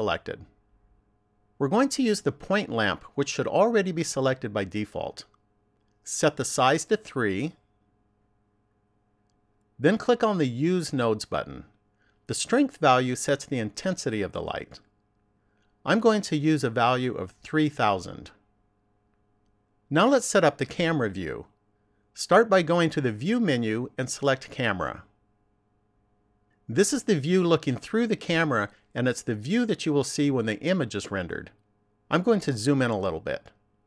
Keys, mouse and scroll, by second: 6.7 click, 10.4 click, 16.1 click, 18.1 0, 23.5 click, 32.8-33.3 scroll up 2.